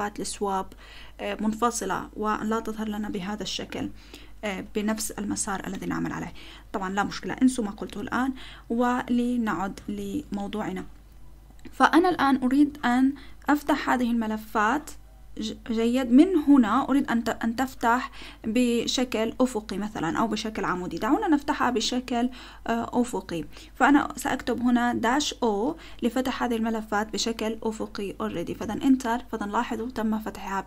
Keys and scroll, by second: 6.1 Return, 9.7 ctrl+l, 12.1 Up, 12.7 Up, 13.1 Up, 14.6-16.3 Left, 16.8 Left, 17.0 Left, 17.1 Left, 17.5 Left, 18.1 Left, 20.5 space, 23.9 -, 25.1 o, 28.6 Return.